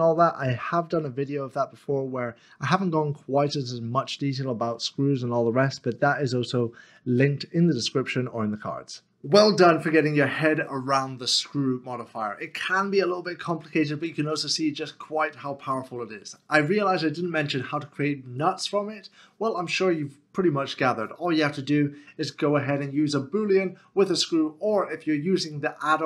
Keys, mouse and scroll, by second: 0.4 middle click, 5.3 middle click.